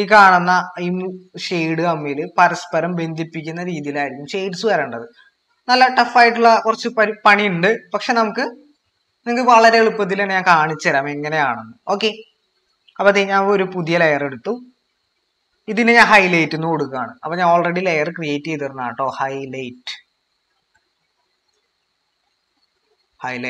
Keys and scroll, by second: 18.4-23.4 typing.